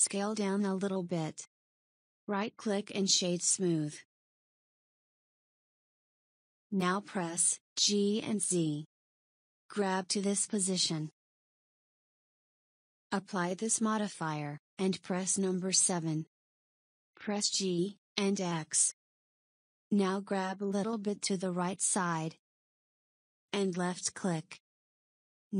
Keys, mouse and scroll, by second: 3.8 right click, 7.3 g, 14.1 click, 15.3 KP_7, 17.1 g.